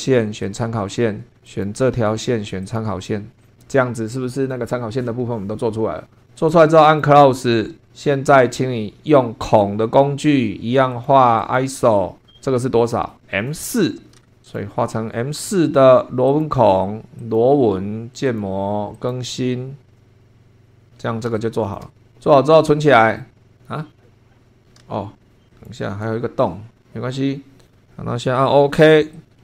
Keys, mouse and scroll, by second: 0.4 click, 1.4 click, 2.6 click, 3.4 click, 6.8 click, 9.4 click, 10.9 click, 11.4 click, 14.4 click, 16.3 click, 17.2 click, 18.3 click, 19.0 click, 20.6 scroll down 1, 21.4 shift+click, 24.8 super+2, 25.5 click, 29.1 click.